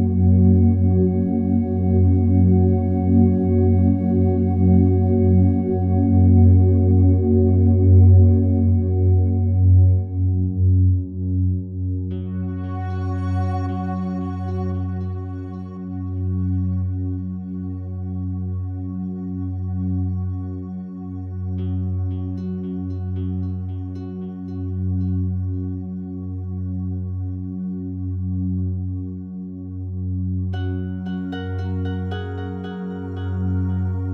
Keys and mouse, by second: 0.8 click, 1.4-2.8 drag, 3.1 click, 4.9-5.9 drag, 6.1 alt+click, 7.4 click, 8.8 alt+click, 9.7 click, 10.7-11.7 alt+drag, 12.0 alt+click, 12.9 1, 14.3-15.6 drag, 16.5 click, 17.2 click, 18.9 alt+click, 20.0 ctrl+alt+click, 20.4 alt+shift+click, 21.0 alt+click, 21.7 ctrl+alt+click, 22.4 alt+click, 23.0 alt+click, 23.7 typing, 24.2 alt+shift+click, 26.3 typing, 26.7 click, 27.3 alt+click, 28.7 click, 29.8 alt+click, 31.0 typing, 32.1-33.4 drag, 33.9 click.